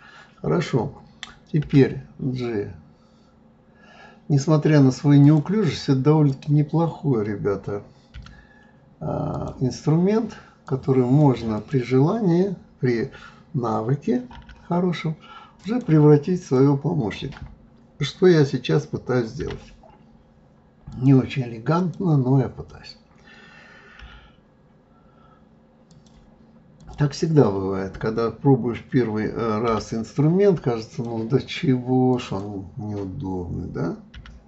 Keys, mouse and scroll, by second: 6.3 click, 8.1 g, 10.6 click, 11.5 click, 14.3 g, 16.4 click, 19.4 g, 21.7 click, 24.0 g, 26.7 click, 29.7 g, 32.1 click, 34.1 g.